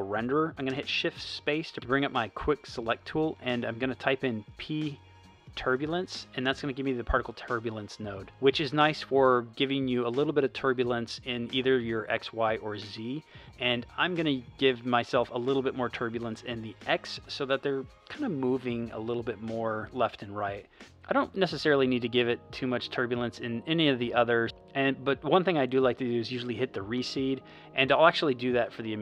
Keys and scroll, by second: 0.6 shift+space, 4.0-6.0 typing, 6.4 Return.